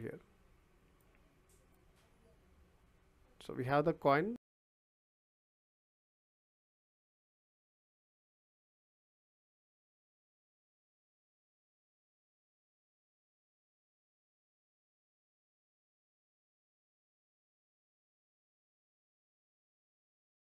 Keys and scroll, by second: 19.7 Delete.